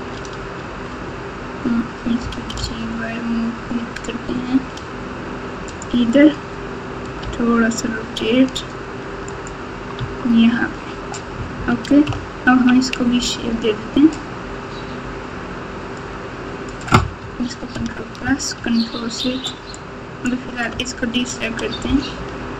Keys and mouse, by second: 0.5 Tab, 2.2 g, 7.2 r, 9.9 Tab, 12.0 ctrl+KP_2, 12.5 ctrl+KP_2, 12.6 ctrl+KP_2, 16.2 click, 17.7 ctrl+KP_Add, 19.9 ctrl+click, 21.8 g.